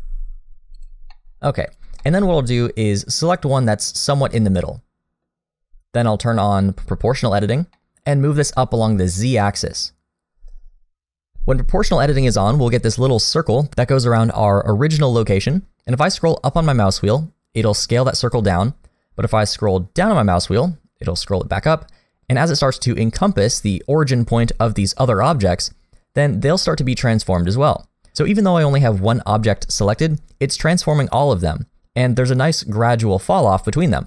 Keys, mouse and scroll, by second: 1.1 middle click, 1.7 click, 2.0 shift+middle click, 2.2 scroll down 1, 2.3-2.7 scroll up 1, 2.7 middle click, 3.2-4.0 scroll down 1, 4.0 click, 4.3 middle click, 5.7-6.8 scroll up 1, 7.1 click, 7.8 middle click, 9.1 click.